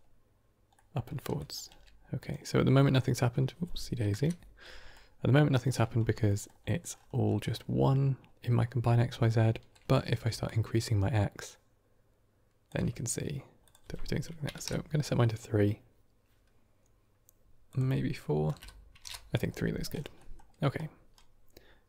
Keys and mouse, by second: 0.7 middle click, 1.3 drag, 1.6 g, 2.7 middle drag, 4.0 KP_7, 4.8 shift+middle click, 6.1 middle click, 6.6 middle click, 7.2 middle click, 9.2-9.6 shift+middle drag, 10.3-12.6 shift+drag, 13.6-19.4 drag, 20.0 middle click, 20.6 d.